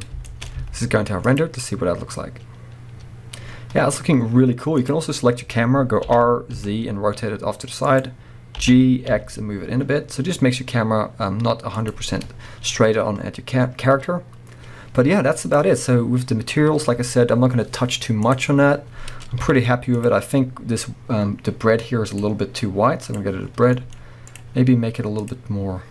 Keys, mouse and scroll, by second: 0.2-2.9 shift+middle drag, 0.5 z, 3.4-3.9 scroll down 1, 3.9-4.4 scroll up 1, 4.9 click, 6.1 r, 8.1 click, 8.7 g, 12.0 click, 12.2-12.9 scroll up 1, 15.5 click, 20.1 z, 20.5 scroll up 1, 23.1 click.